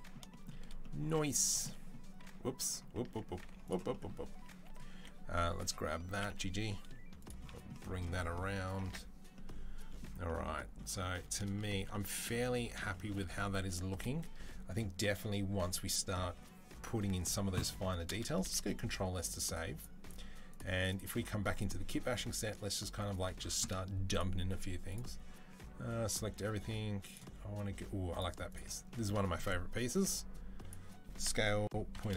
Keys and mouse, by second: 0.9 z, 2.9 Tab, 3.3 z, 4.1 Tab, 4.7 1, 6.0 g, 8.7 Tab, 18.7 ctrl+s, 19.4-20.9 drag, 20.9-26.9 middle drag, 26.9 click, 27.1-28.3 middle drag, 28.3 click, 28.5-29.8 middle drag, 29.8 click, 30.7-32.1 middle drag, 31.1 s.